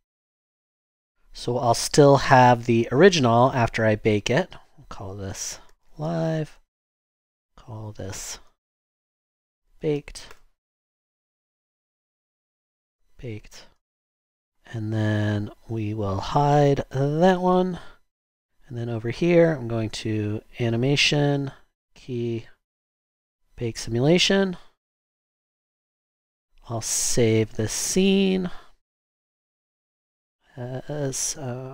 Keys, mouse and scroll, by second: 5.2-6.3 typing, 6.5 Return, 8.1-10.2 typing, 10.3 Return, 12.5-13.9 typing, 17.3 ctrl+h.